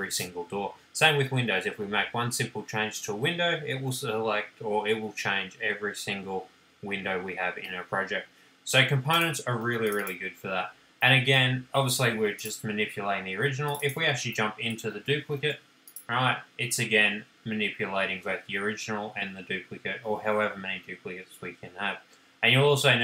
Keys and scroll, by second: 10.7 space, 16.6 p.